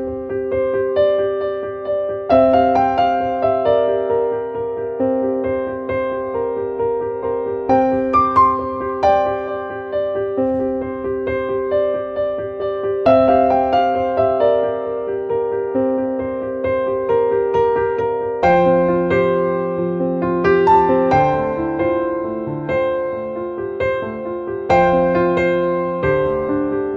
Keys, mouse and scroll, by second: 10.1-11.6 drag, 13.9 click, 15.6 click, 16.9-19.3 drag, 23.4 click, 24.8 right click, 26.3 click.